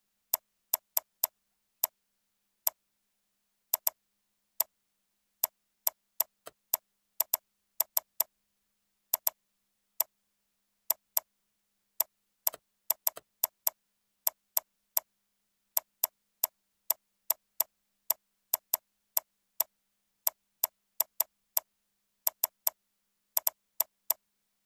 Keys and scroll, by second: 3.6 ctrl+c, 4.0 ctrl+a, 4.3 ctrl+v, 6.4 ctrl+a, 14.0 ctrl+b.